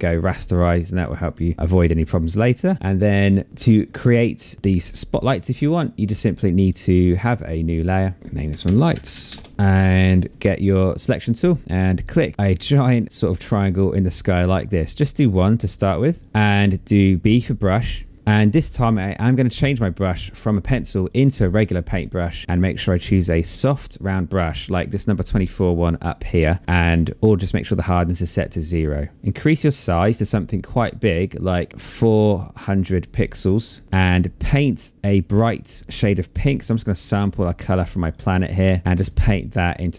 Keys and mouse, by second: 3.5 click, 5.2 click, 6.8 click, 8.4 h, 8.6 Return, 8.6 KP_Enter, 8.6 s, 9.5 click, 10.4 click, 11.9 click, 12.5 click, 15.5 click, 18.1 b, 18.6 click, 20.6 click, 21.7 click, 23.0 click, 28.4 click, 30.6 click, 33.4 click, 36.5 alt+click, 38.0 click.